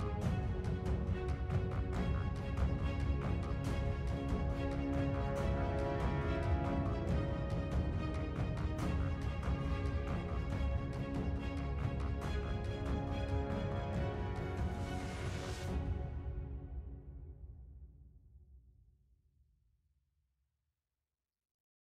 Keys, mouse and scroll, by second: 6.4 scroll up 3, 7.4-7.7 scroll down 2, 8.2 scroll down 2, 9.0-9.7 scroll up 2, 9.9-10.5 scroll down 3, 21.0 right click.